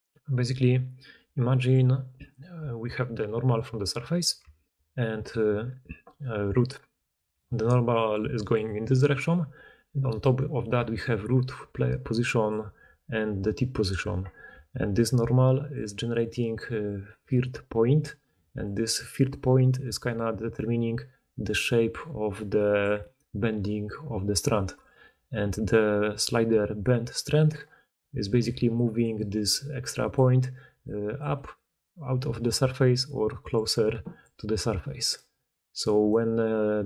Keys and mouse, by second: 2.5-3.7 d, 5.6-24.7 typing, 20.2-36.8 drag, 28.5-35.0 typing, 35.1-36.5 middle drag, 35.1-36.5 right drag, 36.1 d, 36.1 d.